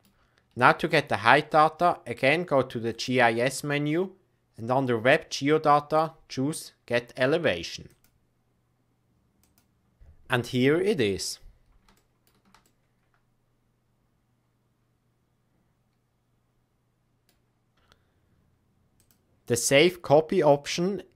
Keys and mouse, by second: 2.9-10.0 drag, 11.9-12.2 shift+middle drag, 12.6-15.2 middle drag, 15.2-15.8 middle drag, 15.8-16.2 middle drag, 16.5-17.2 middle drag, 19.0-21.1 drag.